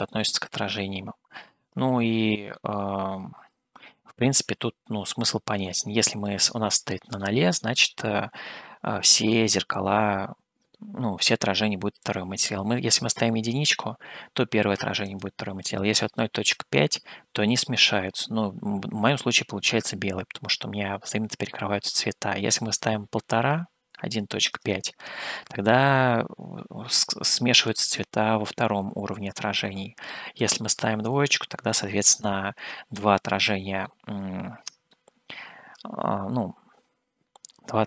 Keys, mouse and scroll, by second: 2.0 scroll up 1, 2.8-6.4 middle drag, 12.0-25.7 drag, 30.4-36.1 drag, 36.1 middle click.